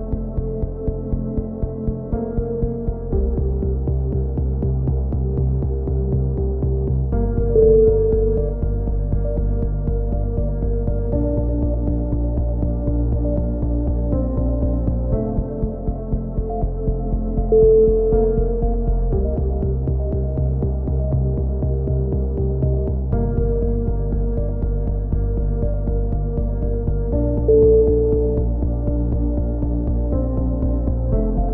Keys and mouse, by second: 0.5 a, 1.1 c, 2.2 right click, 2.6 x, 4.3 click, 4.7 right click, 5.1 middle click, 5.8 x, 7.5 z, 7.9-10.8 middle drag, 9.2 z, 10.9 click, 11.3 c, 12.5-15.8 drag, 17.7 a, 17.9 z, 18.4 Tab, 18.7 middle click, 19.7 click, 20.3 middle click, 21.1 click, 22.3 z, 23.3-25.2 middle drag, 25.3 click, 25.8 z, 26.8 middle click, 27.4 z, 27.7 click, 28.3 middle click, 28.7-30.0 middle drag, 30.4 Tab.